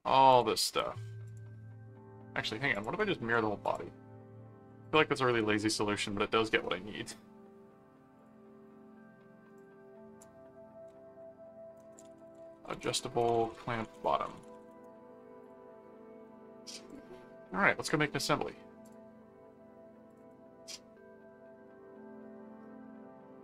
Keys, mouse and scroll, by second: 0.3 click, 1.2 click, 2.7 click, 3.6 click, 4.8 click, 5.3 right click, 6.1 middle click, 8.1 click, 8.4 middle click, 9.0 middle click, 9.5 click, 10.2 ctrl+s, 11.7-15.1 typing, 15.4 click, 16.3 middle click, 16.9 click, 17.8 click, 18.8 click, 20.1 click.